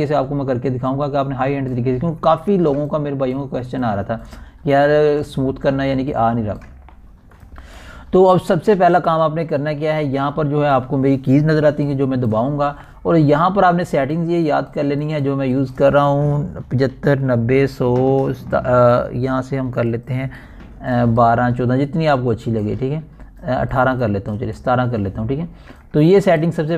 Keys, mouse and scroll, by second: 5.1-5.5 alt+scroll down 3, 6.3 ctrl+alt+scroll down 1, 7.3 scroll, 7.5 ctrl+alt+scroll up 1, 14.8-15.1 ctrl+alt+scroll up 2, 21.4 click, 21.4-26.7 drag.